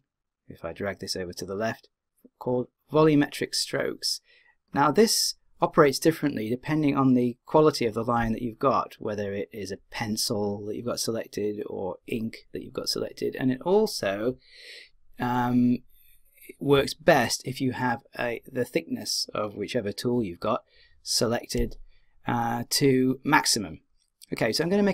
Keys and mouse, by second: 0.4 click.